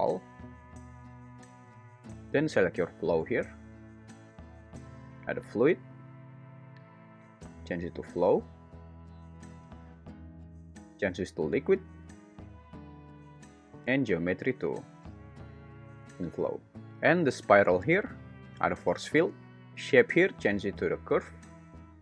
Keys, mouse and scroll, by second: 5.5-8.6 drag, 9.9-12.6 drag, 13.9-16.1 drag, 19.0-21.3 drag.